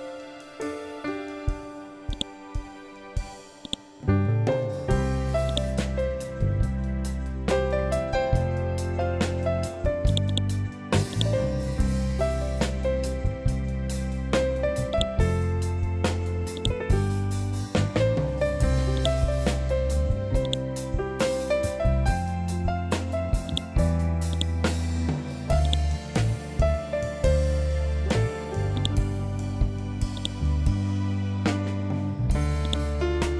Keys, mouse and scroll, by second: 9.5-14.3 drag, 14.4-22.9 drag, 26.4 ctrl+z, 28.2-32.1 drag.